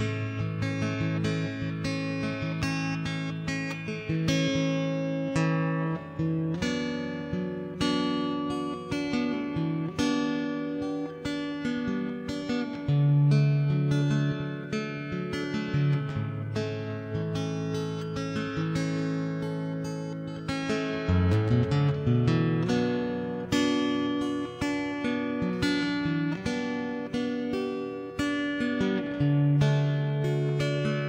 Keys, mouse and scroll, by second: 0.1 shift+b, 1.4 ctrl+b, 3.4 middle click, 3.8 ctrl+KP_Subtract, 4.3 ctrl+z, 4.4 ctrl+KP_Subtract, 4.8 ctrl+z, 5.2 c, 6.1 middle click, 6.3 ctrl+,, 6.5 middle click, 6.8 s, 7.9-9.1 middle drag, 8.9 ctrl+z, 9.1 ctrl+z, 9.2 middle click, 9.6 g, 9.9 right click, 10.2 g, 10.5 right click, 10.7 g, 10.9 middle click, 11.3 ctrl+0, 11.5 middle click, 11.5 right click, 11.9 right click, 12.1-13.3 middle drag, 13.1 s, 14.1 s, 14.7 ctrl+b, 15.3 middle click, 16.2 g, 16.4 right click, 16.8 g, 17.2 ctrl+s, 17.8 middle click, 18.6 click, 18.8 middle click, 19.2 middle click, 19.9-21.7 middle drag, 21.8 ctrl+b, 22.6 ctrl+Tab, 22.7 right click, 23.3 ctrl+b, 24.1 middle click, 24.7 ctrl+Tab, 24.9-26.6 typing, 25.6 click, 25.6 middle click, 26.4 middle click, 27.2 ctrl+KP_3, 27.4 middle click, 27.9 s, 28.5 middle click, 29.0 s, 30.3 middle click.